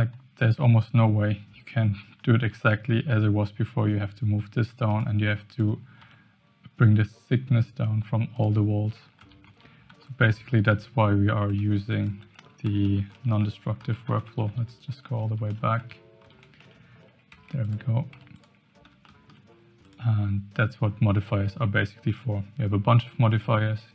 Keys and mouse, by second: 0.5 g, 5.4 click, 5.9 g, 9.2-16.9 ctrl+z, 12.0 click, 17.3 Tab, 18.1 x, 19.0 shift+click, 19.8 click, 22.0 click, 23.3 click.